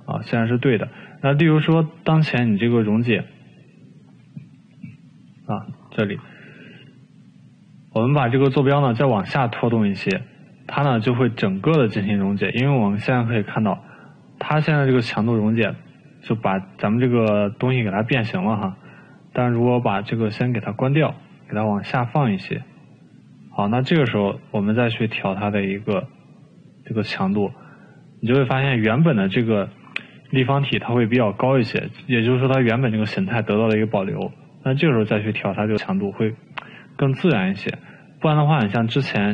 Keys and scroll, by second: 13.0 ctrl+z, 33.3 ctrl+z.